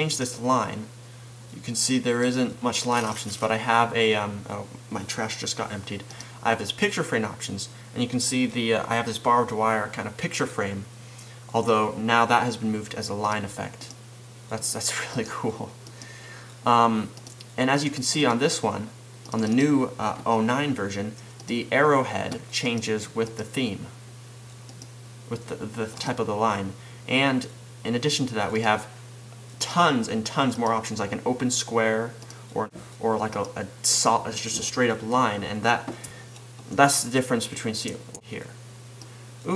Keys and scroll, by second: 38.1 super+v.